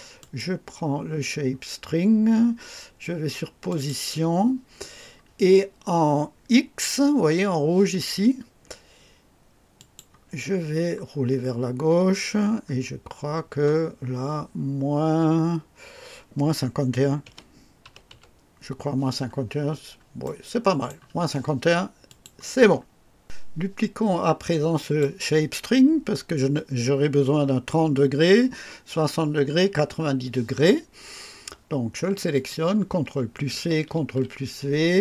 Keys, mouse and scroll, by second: 0.1 click, 3.6 click, 9.7 click, 10.4-11.0 scroll down 2, 11.1-12.5 scroll down 8, 13.1 scroll down 2, 17.2 -, 17.8 KP_5, 18.1 KP_1, 19.2-19.9 scroll down 3, 20.2 right click, 22.0 click, 24.7 click, 32.3 click, 33.4 ctrl+c, 33.9 ctrl+v.